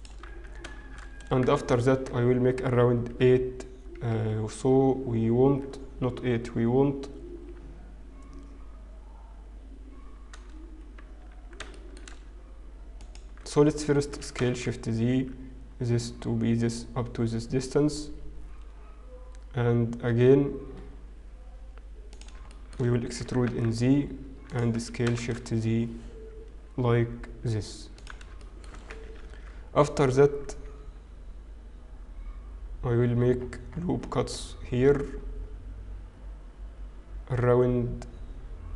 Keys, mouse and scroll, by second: 2.4 ctrl+r, 2.4 click, 2.4-3.9 scroll up 2, 2.4 shift+z, 12.3 shift+middle click, 12.3-13.0 scroll up 1, 13.4 alt+click, 14.1 s, 22.5 shift+middle click, 23.2 e, 24.6 s, 29.2 ctrl+r, 29.2 shift+middle click.